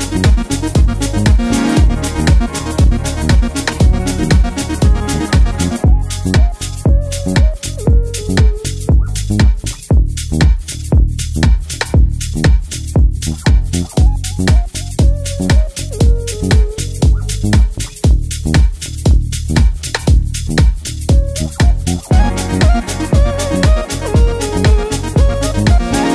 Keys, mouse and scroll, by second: 6.9-7.2 click, 12.8 space, 13.4 click, 13.7 space, 14.1 click, 14.2-14.7 space, 15.6 click, 16.7 right click, 17.9 click.